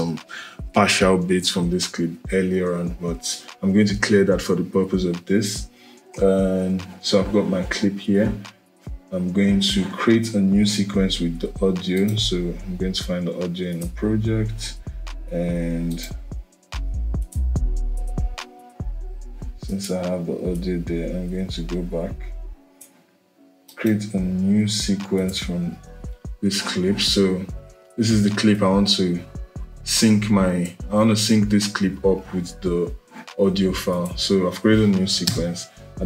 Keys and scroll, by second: 35.0 BackSpace.